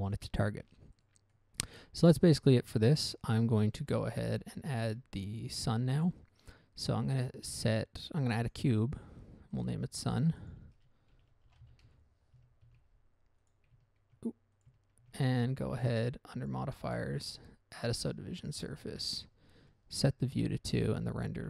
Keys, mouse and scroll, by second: 1.3 middle click, 1.4 middle click, 1.7 middle click, 2.6 scroll down 1, 2.8 middle click, 3.1 middle click, 3.4-3.7 scroll up 1, 4.4 shift+middle click, 4.8 shift+a, 8.8 click, 9.9 click, 10.4 click, 10.8 click, 10.8 double click, 11.5-12.0 typing, 12.2 Return, 13.0 ctrl+c, 13.8 click, 14.9 click, 15.4 ctrl+v, 16.8 click, 17.2 click, 17.3 double click, 17.6 double click, 18.8 click, 19.4 click, 20.7 2, 20.8 Tab.